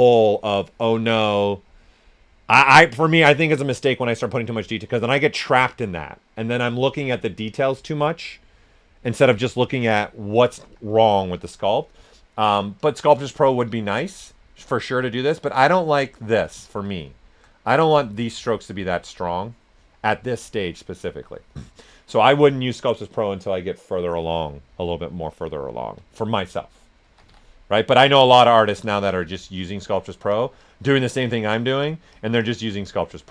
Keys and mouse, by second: 9.9 right click, 10.6 s, 10.7 click, 11.2 alt+right click, 12.8 click, 13.2 ctrl+right click, 13.8 s, 13.9 click, 16.6 ctrl+right click, 18.0 click, 18.4-21.7 shift+drag, 18.7 typing, 25.7 ctrl+right click, 26.0-27.0 typing, 28.0 alt+click, 32.8-33.3 shift+drag.